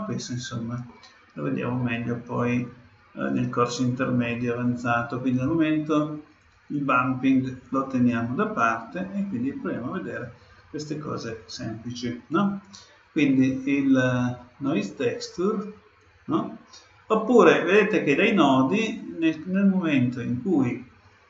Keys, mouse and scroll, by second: 1.8-3.6 middle drag, 5.4-7.2 drag, 7.7-9.5 middle drag, 13.4-17.0 drag.